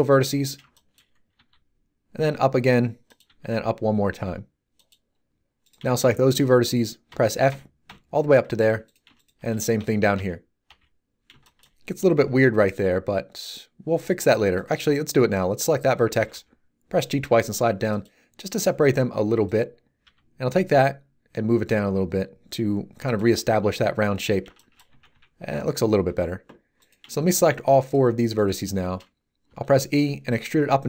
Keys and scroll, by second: 1.3 e, 7.1 f, 12.1 z, 16.1 g, 20.0 g, 24.9 a, 29.4 e.